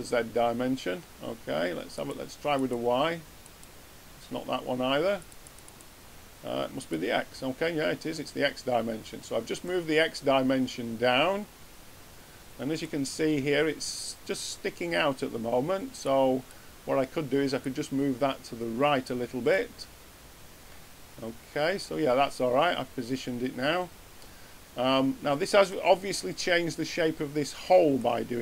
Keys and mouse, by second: 1.9-8.6 drag.